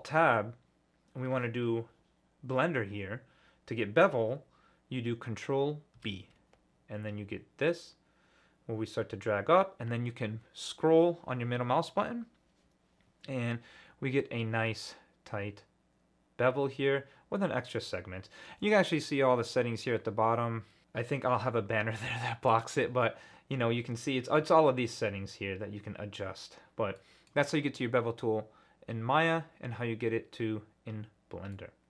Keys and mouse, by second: 5.9 ctrl+b, 22.5-24.3 middle drag, 27.0 middle click, 31.5 middle click.